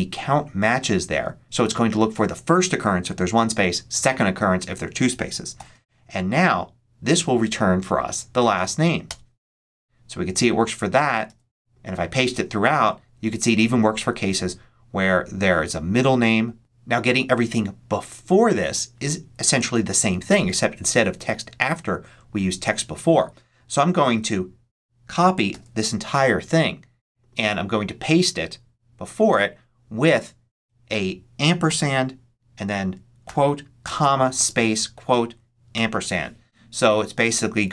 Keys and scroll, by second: 5.5 shift+0, 9.0 Return, 11.2 super+c, 12.1 super+v, 23.9 super+a, 25.4 super+c, 27.9 super+v, 30.9 BackSpace, 31.6 shift+7, 33.1-35.6 typing.